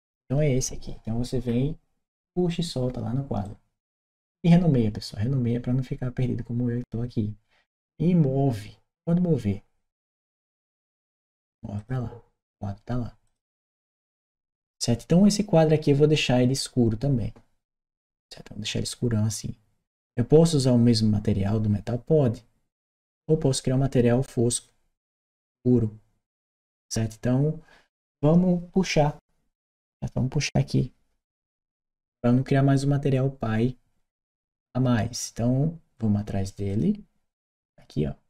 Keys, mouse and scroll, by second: 1.3-1.6 scroll down 2, 3.2-4.3 drag, 10.0 click, 11.6 click, 13.0 click, 29.3 click, 36.5 click.